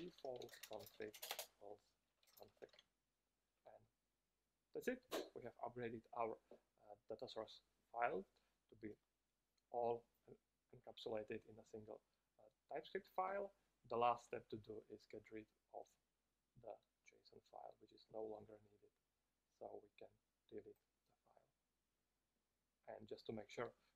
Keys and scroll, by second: 1.6 space.